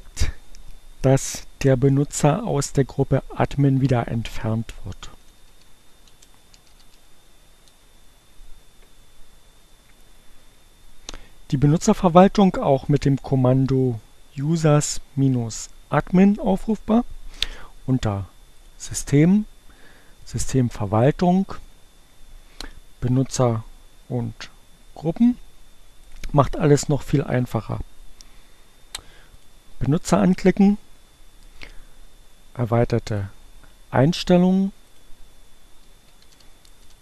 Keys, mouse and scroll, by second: 5.9-7.3 typing, 29.3 click, 34.9 click.